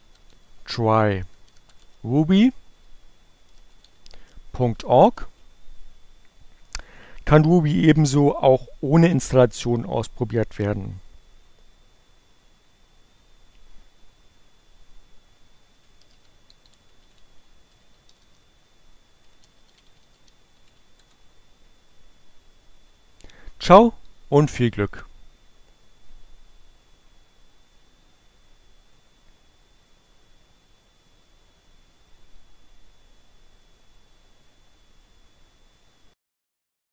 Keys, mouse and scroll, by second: 0.7 click, 1.3 click, 1.6-4.6 typing, 6.7-8.0 typing, 16.9-17.9 typing, 19.5-22.8 typing.